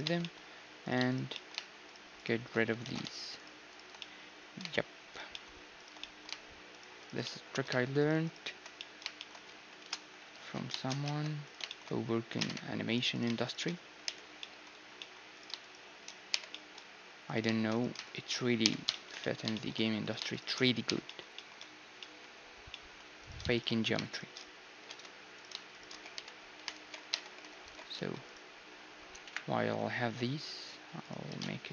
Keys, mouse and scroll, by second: 0.0 Tab, 0.2 click, 0.2 right click, 0.4-11.0 middle drag, 2.8 ctrl+z, 4.2-6.3 right drag, 6.3-9.8 drag, 9.8 ctrl+KP_Add, 10.3 ctrl+x, 11.0 ctrl+Tab, 11.6-13.8 middle drag, 12.4 ctrl+Tab, 13.1 click, 13.8-19.8 right drag, 14.0 j, 16.3 j, 17.2-18.4 drag, 18.6 j, 18.9 click, 19.8 middle click, 20.0-22.7 drag, 20.0-22.7 right drag, 20.9 j, 22.7 middle click, 23.2 click, 23.2-27.6 right drag, 25.4 a, 26.1 j, 26.4-28.3 middle drag, 26.8 alt+h, 27.1 Tab, 27.6 alt+h, 27.9 a, 28.3-30.3 right drag, 29.2 KP_1, 30.3 s, 31.3 s.